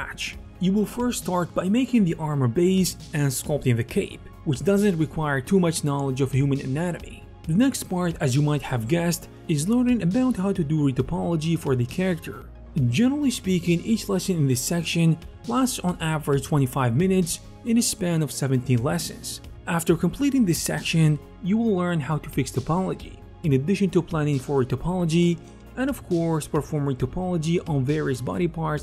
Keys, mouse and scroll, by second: 0.5-2.2 drag, 1.1 ctrl+z, 1.1 f, 2.2 ctrl+shift+d, 2.2 middle click, 2.2 f, 2.2 f, 2.4 ctrl+z, 2.4-4.2 drag, 2.9 ctrl+z, 3.3 f, 3.5 f, 4.1 ctrl+z, 4.2 alt+middle click, 4.4-5.8 drag, 4.7-5.6 typing, 5.8 alt+middle click, 6.0-7.0 ctrl+drag, 7.0 ctrl+middle click, 7.2 click, 19.6-20.8 middle drag, 19.6-20.2 typing, 20.0 ctrl+z, 20.2 click, 20.8 alt+click, 21.0 alt+middle click, 21.2-23.2 ctrl+alt+shift+middle drag, 21.7 k, 22.3 k, 23.4-25.2 middle drag, 23.5-25.2 typing, 25.2-26.4 drag, 26.4 alt+2, 26.4 middle click, 26.6 click, 26.8 alt+f, 26.8 middle click, 27.0-28.7 alt+drag, 27.0 1, 27.8 alt+shift+2, 28.7 alt+shift+middle click.